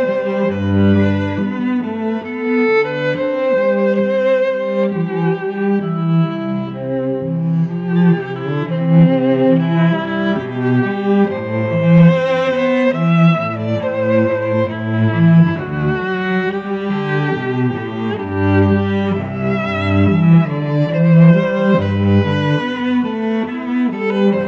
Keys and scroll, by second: 1.9 Return, 3.0 space, 8.0 Return, 10.1 space, 10.5 ctrl+t, 12.4 Return, 12.8 shift+Down, 13.0 shift+Right, 13.3 shift+Down, 13.5 shift+Right, 13.8 shift+Down, 14.0 shift+Left, 14.4 ctrl+t, 16.0 Return, 18.9 ctrl+1, 19.2 Tab, 20.8 shift+Right, 22.7 t, 24.0 -.